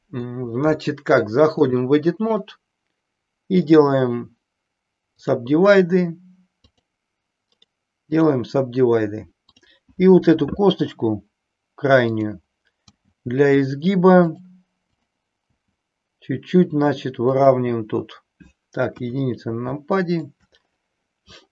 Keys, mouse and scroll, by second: 1.5 click, 3.5-5.4 right drag, 6.6 click, 7.5 right click, 9.5 click, 12.0 click, 13.0 g, 14.3 click, 15.8 g, 17.4 click, 19.0 KP_1, 19.6 shift+middle click.